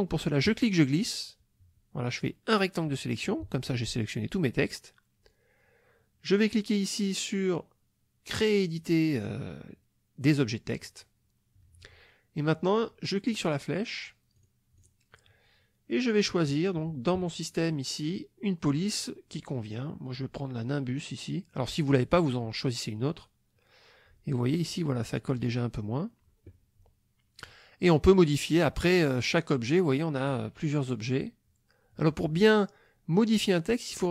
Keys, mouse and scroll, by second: 0.5-2.5 drag, 10.8 click, 13.3 click, 14.4 click, 14.8 click, 18.0-18.3 scroll down 1, 18.8-19.3 scroll down 1, 23.0 click, 28.6 click, 30.3 click.